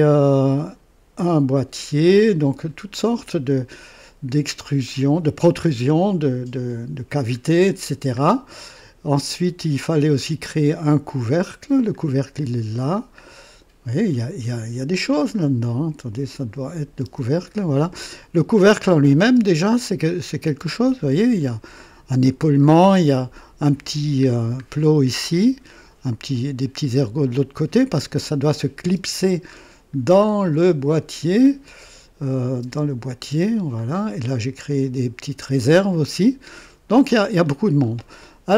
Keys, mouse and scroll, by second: 2.3-2.6 scroll down 1, 7.4-7.8 scroll down 1, 11.1-11.7 scroll down 2, 12.4-13.0 scroll down 1, 15.3-15.7 scroll up 1, 16.7 click, 17.1 space, 18.0 click, 19.0 click, 19.3 space, 19.7-21.6 drag, 22.6-22.9 scroll up 2, 24.2-24.7 scroll down 2, 24.8-26.4 drag, 27.0-28.2 drag, 29.0 space, 29.5-29.8 scroll up 1, 30.2 scroll up 1, 31.4 click, 31.8 space, 32.6 space, 33.0 click, 33.3 space, 33.8-35.3 drag, 35.8-37.2 drag, 37.3-38.1 scroll down 2, 37.5-38.1 typing.